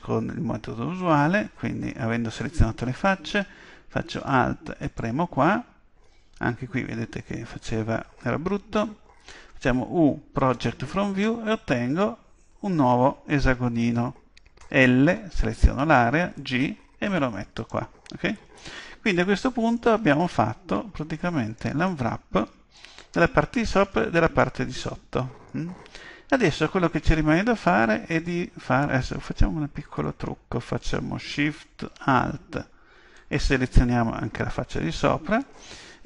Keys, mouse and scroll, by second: 4.8-6.7 right drag, 9.5 u, 16.3 g, 17.7-19.4 drag, 19.8-23.7 middle drag, 24.0-27.1 middle drag, 33.2-35.0 right drag.